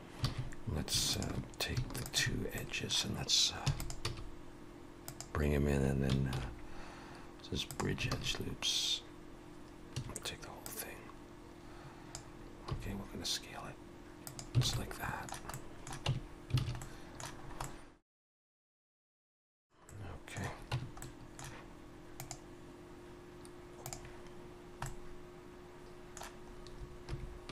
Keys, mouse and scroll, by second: 0.3 alt+a, 1.1 alt+shift+click, 2.5 middle click, 3.7 e, 4.1 s, 6.4 ctrl+e, 8.1 alt+a, 9.9 a, 10.7 click, 12.7 s, 14.7 alt+a, 14.8 alt+middle click, 15.5 middle click, 16.1 Tab, 16.6 alt+a, 16.8 middle click, 17.5 scroll up 2, 17.6 middle click, 18.7-19.1 scroll down 3, 19.6 click, 19.9 middle click, 20.8 Tab, 21.0 middle click, 24.9 middle click, 27.1 3, 27.2 scroll up 2.